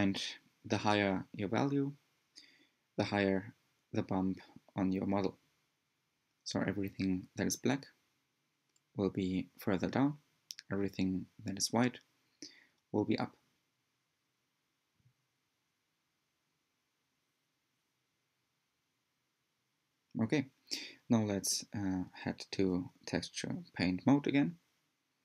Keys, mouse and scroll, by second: 4.6-7.9 drag, 9.5-11.9 drag, 13.5-17.7 drag, 19.9-21.3 scroll down 1, 21.3-22.3 scroll down 1, 22.3-22.9 scroll down 1, 22.9 click, 23.7 shift+middle click, 23.7-24.3 drag, 24.3 shift+middle click, 24.3 drag, 24.6 shift+middle click, 24.7-25.1 drag, 25.1 shift+middle click, 25.1 drag.